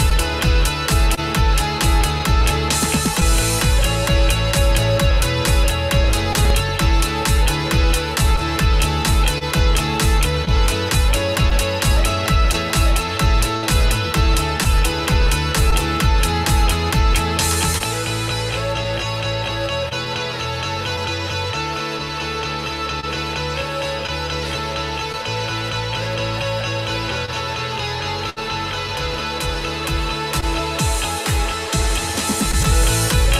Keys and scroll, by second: 12.8 F16.